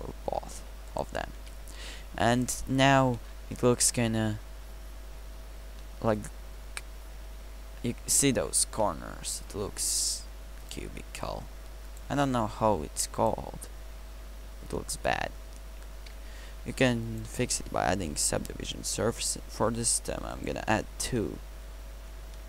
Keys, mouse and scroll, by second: 1.4 t.